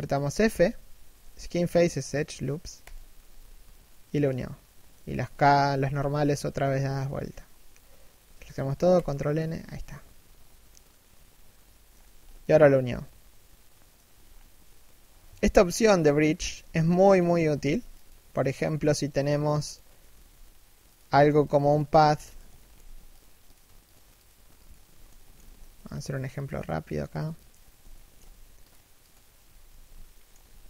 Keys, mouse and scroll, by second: 0.1 f, 3.5 middle click, 5.5 a, 6.4 ctrl+n, 9.6 middle click, 11.6-11.9 scroll down 1, 11.9 middle click, 13.8-15.2 scroll down 1, 15.2-16.8 typing, 16.7 scroll down 1, 17.7 Tab, 18.0 shift+middle click, 19.8 g, 20.8 a, 21.1 alt+right click, 22.2 alt+shift+middle click, 22.8 ctrl+click, 24.8 shift+middle click, 25.2-25.6 scroll down 1, 25.6 ctrl+click, 27.5 shift+middle click, 28.3 ctrl+click, 29.2 scroll down 1, 29.3 a, 29.8 alt+shift+middle click, 30.1 a.